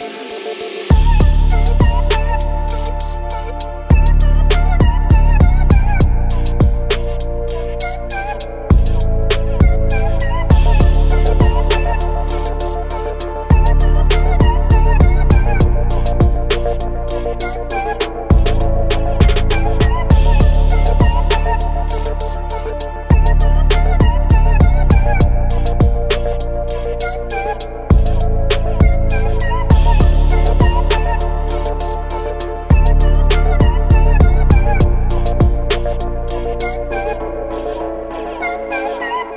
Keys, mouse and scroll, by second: 0.0 middle click, 2.7 Tab, 4.7 click, 6.9-10.3 drag, 18.4 Tab, 20.2 click, 21.4-21.7 drag, 22.1-26.2 drag, 27.8 click, 31.7-34.3 drag.